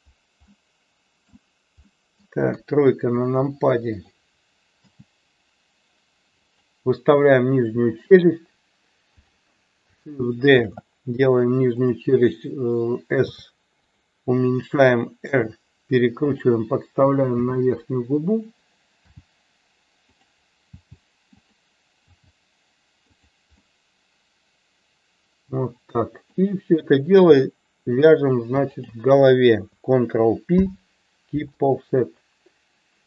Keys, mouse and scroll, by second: 0.4 middle click, 1.8 middle click, 2.5 KP_3, 3.9 click, 4.9 g, 6.4 click, 9.2 click, 10.5 shift+d, 11.7 click, 13.3 s, 13.8 click, 15.2 r, 16.2 click, 17.3 f, 20.0 click, 20.7 g, 21.3 click, 22.0 g, 23.2 click, 23.6-26.3 middle drag, 28.8 shift+click, 30.6 ctrl+p.